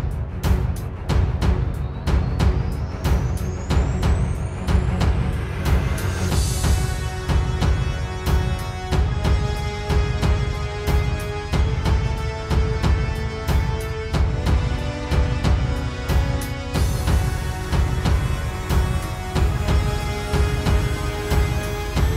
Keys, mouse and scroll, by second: 8.7-10.7 scroll down 14, 10.7 middle click, 11.8-12.5 scroll up 2, 12.5 scroll down 1, 12.6 middle click, 13.6 click, 14.4 click, 16.4 click, 17.1-18.3 scroll up 11, 18.3 scroll down 1, 18.4 middle click, 19.4 right click, 20.8 click.